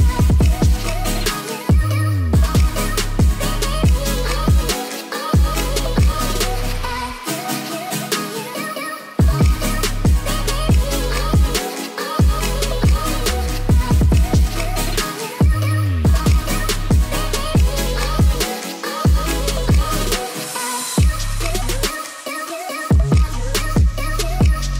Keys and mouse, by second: 0.5-0.8 middle drag, 1.5 g, 3.4-4.1 drag, 4.1 ctrl+z, 4.4-4.7 middle drag, 5.0 g, 6.9 drag, 7.4 ctrl+s, 7.7 drag, 8.2 shift+a, 12.1-12.6 middle drag, 13.0 s, 15.4-15.7 ctrl+drag, 16.3-16.6 middle drag, 16.8 click, 17.5-18.3 middle drag, 18.5 shift+middle drag, 19.0 shift+middle click, 19.6 g, 19.8 y, 20.2 x, 21.8-22.1 middle drag, 22.6 ctrl+z, 23.1-23.5 middle drag, 23.8 g, 24.0 y, 24.4 x.